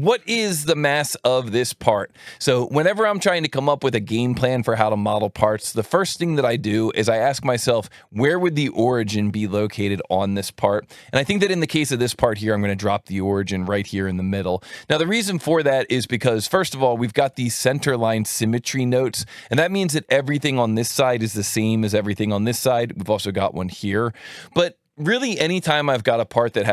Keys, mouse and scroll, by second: 9.1 click, 12.5-13.7 drag, 16.1-17.1 drag, 17.8 click, 19.6 click, 21.1-22.1 drag.